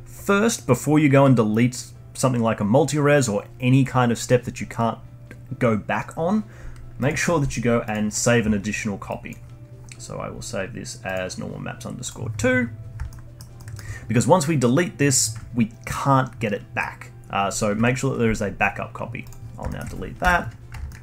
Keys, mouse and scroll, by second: 7.0-8.4 drag, 9.2 click, 13.1-16.6 alt+middle drag, 19.2 click, 19.7-20.3 alt+middle drag, 20.3 /, 20.9 alt+middle click.